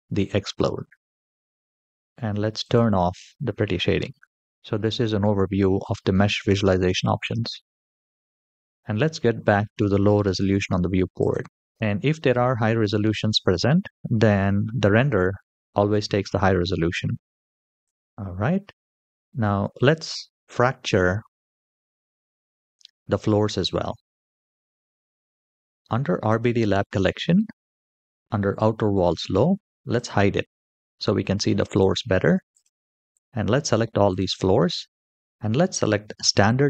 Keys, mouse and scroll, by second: 2.4 click, 3.8-4.5 scroll up 3, 4.5 shift+middle click, 4.5-4.8 scroll up 1, 4.8-6.0 scroll down 5, 6.7-8.3 scroll up 3, 11.0 click, 17.3 shift+middle click, 17.6 click, 18.5-19.1 middle drag, 19.6-20.0 shift+middle drag, 20.4-20.8 middle drag, 21.3 shift+middle click, 26.0 click, 29.7 click, 31.4 click, 32.3 shift+click, 32.9 shift+click, 33.4 shift+click, 33.8 shift+click, 36.1 click.